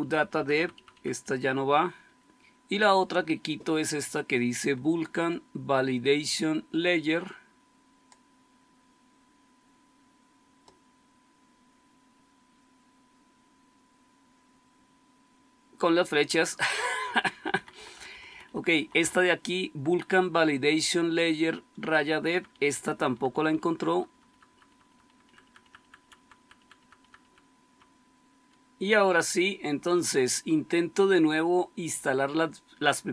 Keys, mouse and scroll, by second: 0.1 Delete, 0.3 Delete, 0.5 Delete, 0.6 Delete, 0.8 Delete, 1.1 Delete, 4.6-17.0 Left, 17.2 Left, 17.5 Left, 17.7 Left, 17.9 Left, 18.0 Left, 18.2 Left, 18.4 Left, 18.7 Left, 19.0 Left, 22.2 Delete, 22.4 Delete, 22.9 Delete, 23.1 Delete, 23.4 Delete, 23.6 Delete, 23.8 Delete, 24.0 Delete, 24.2 Delete, 24.4 Delete, 24.6 Delete, 24.8 Delete, 25.0 Delete, 25.3 Delete, 25.5 Delete, 25.7 Delete, 25.9 Delete, 26.1 Delete, 26.3 Delete, 26.5 Delete, 26.7 Delete, 26.9 Delete, 27.6 Delete.